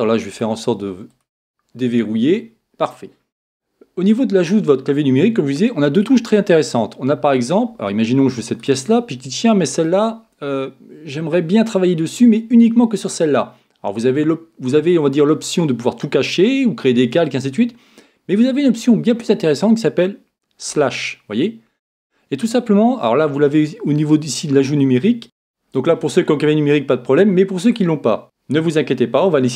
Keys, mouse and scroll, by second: 0.3-2.9 drag, 8.8-10.4 right drag, 10.5-14.0 right drag, 20.7 KP_Divide, 25.2 a, 28.2-29.4 drag.